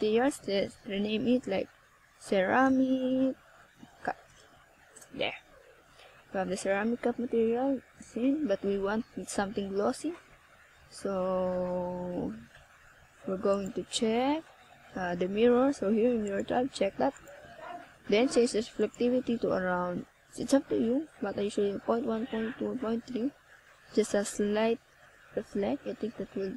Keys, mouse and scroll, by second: 0.8 click, 3.5 right click, 4.6-5.4 scroll up 4, 6.1 click, 7.8 click, 9.0 click, 12.8 click, 14.6 click, 15.3 click, 16.6 click, 18.0 click, 19.7 scroll down 1, 23.3 click.